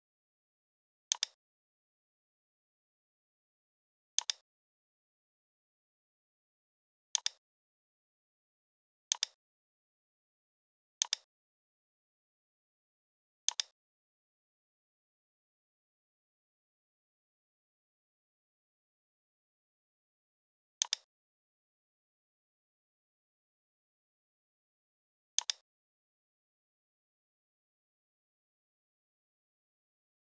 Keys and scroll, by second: 1.7 i, 5.7 v, 22.4 i, 26.9 v, 28.0 shift+x.